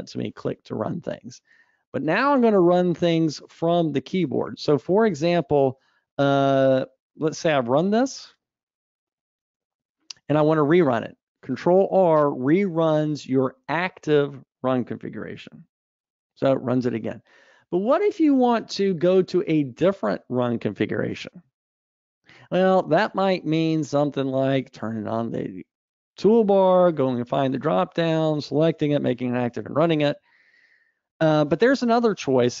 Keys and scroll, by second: 15.4 ctrl+r.